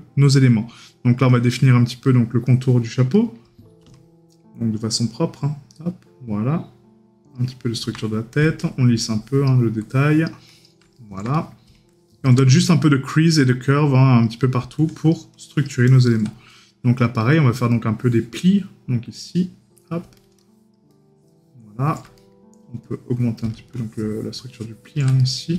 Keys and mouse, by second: 3.2 right click, 11.0 right click, 16.6 right click, 22.2 right click, 25.3 right click.